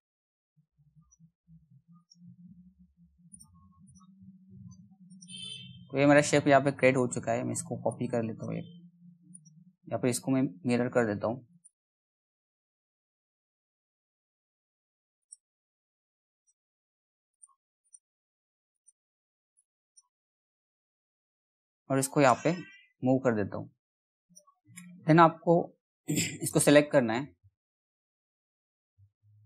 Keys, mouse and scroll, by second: 4.0-4.3 scroll down 1, 4.3 middle click, 4.7 click, 7.5 shift+click, 8.9 click, 14.8-19.8 drag, 19.8-20.7 scroll up 1, 20.7-22.2 drag, 24.5-29.4 drag.